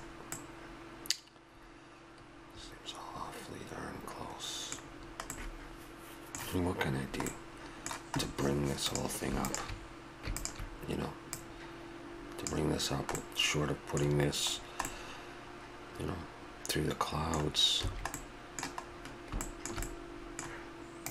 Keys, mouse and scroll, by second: 0.3-2.5 middle drag, 4.0 middle click, 4.3-5.6 middle drag, 5.8-7.3 middle drag, 8.3-8.8 middle drag, 8.8-10.5 right drag, 10.5-12.9 drag, 12.9-16.9 middle drag, 17.8 a, 18.2-20.0 middle drag.